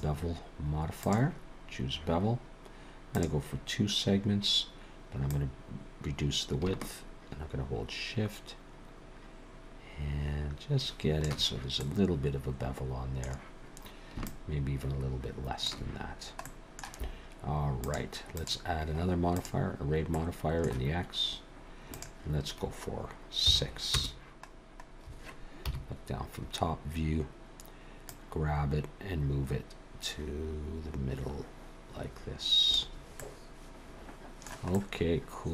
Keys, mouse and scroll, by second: 1.7-3.0 scroll up 1, 3.0 scroll up 1, 3.1 click, 3.9-4.7 scroll up 1, 5.2 click, 11.8 middle click, 14.2 shift+click, 16.1-16.4 scroll down 1, 16.4 middle click, 17.8 click, 18.3 click, 20.1 middle click, 21.9 click, 24.5-25.6 scroll down 2, 25.6 KP_7, 28.1 click, 33.2 middle click, 34.7 middle click.